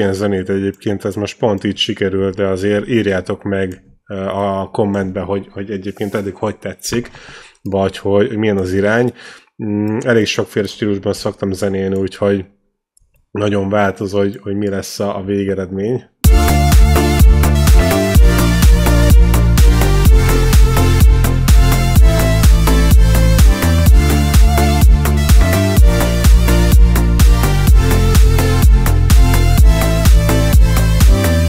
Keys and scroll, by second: 2.4 shift+Down, 11.4 shift+Down, 16.0 space.